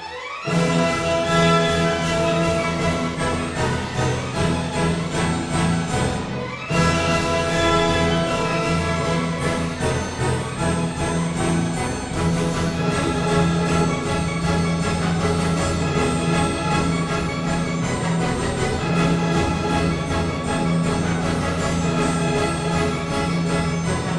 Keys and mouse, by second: 3.1 Tab, 4.1 ctrl+r, 6.3 click, 8.4 Tab, 9.7 Tab, 12.3 ctrl+r, 13.5 click, 13.5 Tab, 14.8 Tab, 15.2 ctrl+r, 16.5 click, 16.7 ctrl+r, 18.1 click, 18.1 Tab, 23.4 KP_7.